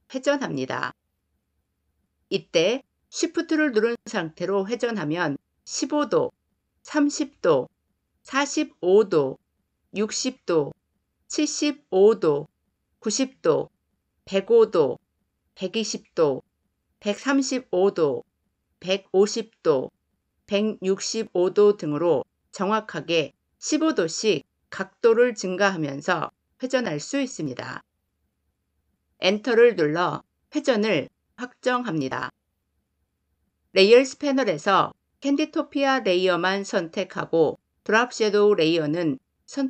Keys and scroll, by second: 29.1 Return.